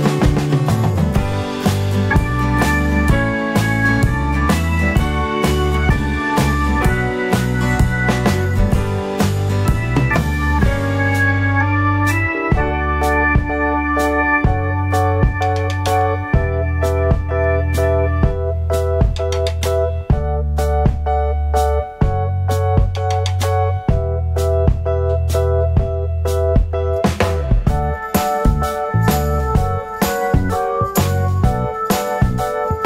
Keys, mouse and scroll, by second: 0.0-9.7 drag, 0.2-0.8 scroll up 2, 0.8-2.6 scroll down 2, 3.0-3.7 scroll up 2, 7.6 g, 9.7 ctrl+a, 10.7 scroll down 1, 12.3-16.0 drag, 16.0 g, 21.6 h, 26.2-27.3 drag, 27.0 g, 27.3 right click, 28.1 alt+d, 30.5 alt+a, 31.1 click, 31.7 h.